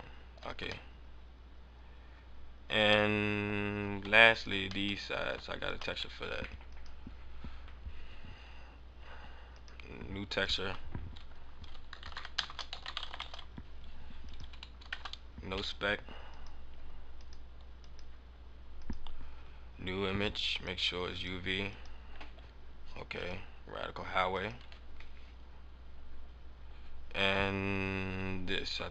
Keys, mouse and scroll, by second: 0.8 middle click, 0.8 scroll up 1, 2.6 scroll down 1, 3.0 middle click, 3.5-4.0 scroll down 2, 4.1 Tab, 4.3 right click, 4.8 middle click, 5.6 shift+right click, 6.7 click, 7.6 click, 9.5 click, 10.4 click, 13.7 scroll up 1, 14.2 click, 16.2 click, 16.6-17.1 scroll up 4, 17.1 click, 17.7 click, 19.3-19.6 scroll down 2, 20.4 click, 21.7 click.